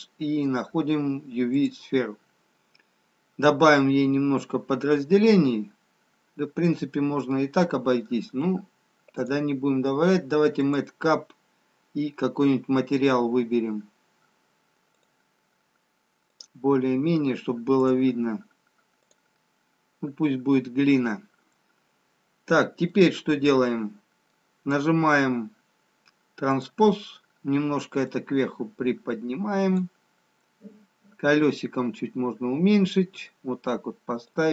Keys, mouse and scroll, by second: 5.9-6.2 scroll down 1, 7.3 middle click, 9.6 click, 21.5-22.6 scroll down 1, 22.6-23.2 scroll down 3, 23.2 middle click, 26.4 click, 28.0 click, 30.3 scroll down 4, 31.1-32.1 scroll down 3, 32.1-34.0 scroll down 3.